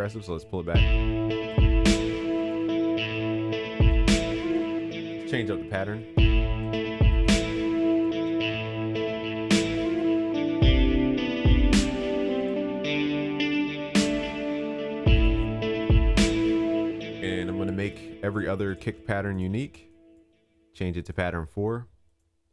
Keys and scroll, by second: 2.9 ctrl+s, 8.4 ctrl+s.